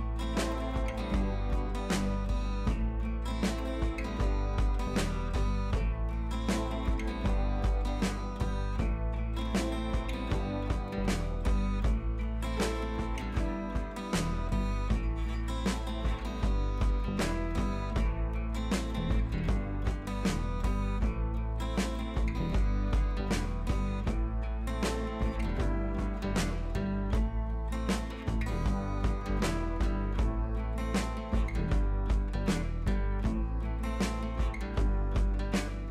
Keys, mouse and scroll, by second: 11.4-12.1 drag, 12.8 click, 14.7-15.2 click, 19.6-24.0 drag, 27.8 ctrl+t, 28.5-29.0 alt+drag, 33.7 ctrl+t, 34.3-35.0 alt+drag, 35.8 scroll up 1.